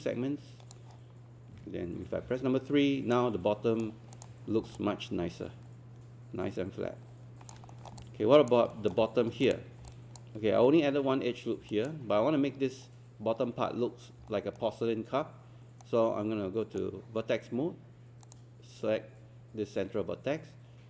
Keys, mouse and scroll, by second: 2.3 3, 2.9 scroll down 1, 3.1 right click, 4.1 click, 4.6 alt+scroll down 1, 8.0 alt+click, 8.7 alt+middle click, 9.2 scroll up 1, 9.5 click, 9.9 alt+click, 11.7 alt+click, 14.3 alt+middle click, 15.8 right click, 18.3 click.